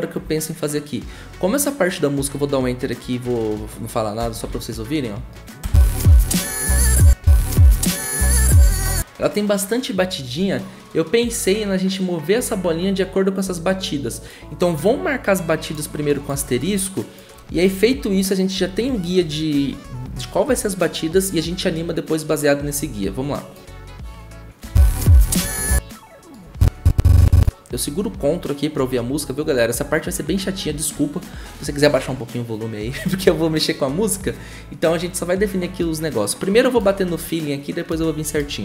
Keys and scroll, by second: 4.4 -, 5.6 0, 7.0 0, 24.6 0.